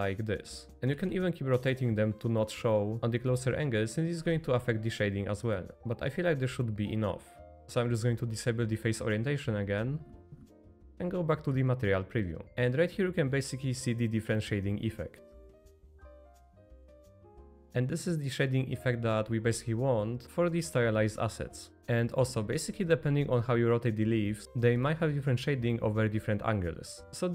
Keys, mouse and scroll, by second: 0.1 middle click, 0.7 middle click, 0.7 r, 0.8 r, 2.9 click, 3.3 middle click, 3.7-5.7 r, 5.1 click, 5.6 middle click, 5.7 z, 6.4-7.6 drag, 7.6 Escape, 7.6 Tab, 7.6 KP_5, 7.9-10.1 drag, 10.3 z, 12.4 middle click, 12.7-15.3 middle drag, 16.1-17.4 middle drag, 19.8-21.8 middle drag, 21.8-22.2 shift+middle drag, 26.5-27.3 middle drag.